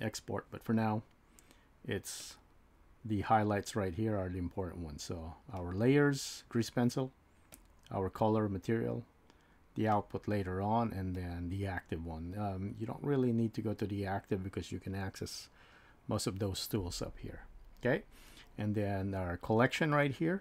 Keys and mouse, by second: 11.1 click.